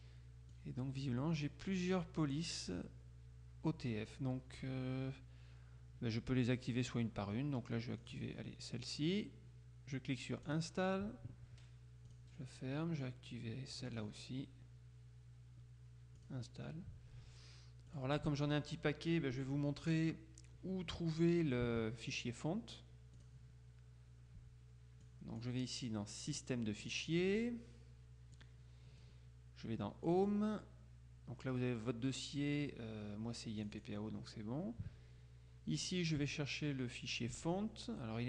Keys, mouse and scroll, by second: 0.7 click, 8.1 click, 10.5 click, 12.1 click, 13.9 click, 16.3 click, 17.9 click, 23.3 click, 25.1 click, 26.4 click, 28.5 click, 30.2 click, 33.7 click.